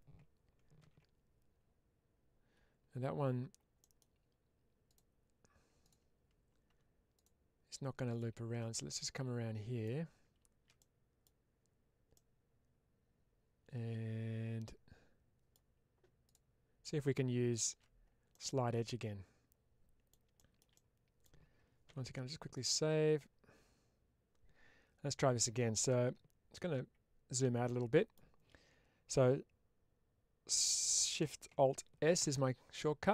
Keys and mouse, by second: 3.7 middle click, 4.8 click, 5.7 alt+click, 8.9 middle click, 10.6 middle click, 12.0-15.9 middle drag, 18.2-19.9 middle drag, 20.2 shift+middle click, 21.9 ctrl+s, 27.5 middle click.